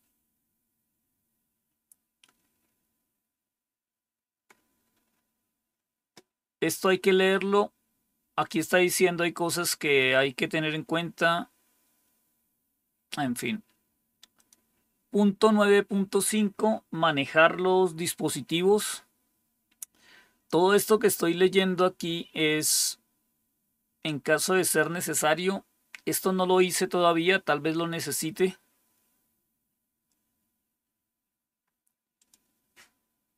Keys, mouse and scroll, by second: 1.1-2.0 scroll down 1, 2.0-4.4 scroll down 1, 4.4-5.6 scroll down 1, 5.6-6.9 scroll down 1, 6.9-9.3 scroll down 1, 9.3-10.6 scroll down 1, 10.6-14.2 scroll down 1, 14.2 click, 28.6-29.2 scroll down 1, 29.2-30.0 scroll down 1, 30.6-32.0 scroll down 1, 32.0 scroll down 1, 32.1 click, 32.7-33.3 scroll down 1.